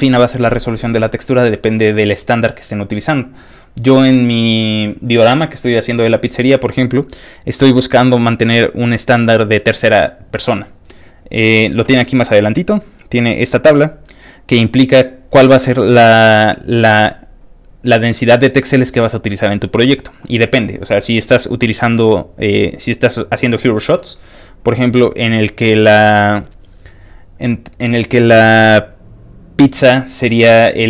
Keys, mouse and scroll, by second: 11.2 click, 11.3 click, 13.5 click, 14.1 click, 14.2 click.